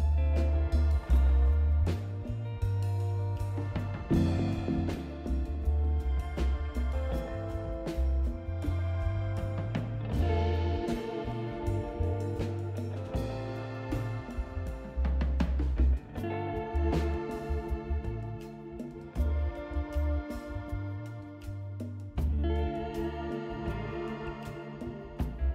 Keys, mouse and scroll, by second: 0.9-6.9 drag, 7.7 click, 9.8 click, 11.9 2, 13.1 click, 14.1-16.8 drag, 18.3 click, 19.5 scroll up 1, 19.6 scroll down 1, 20.2-21.2 drag, 21.3 right click.